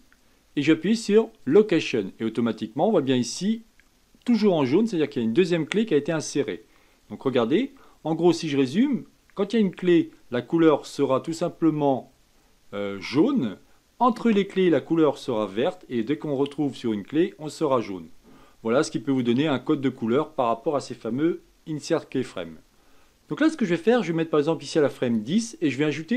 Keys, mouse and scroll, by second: 7.2-10.4 drag, 21.6-22.7 shift+middle drag, 22.7 click, 23.9-26.1 drag.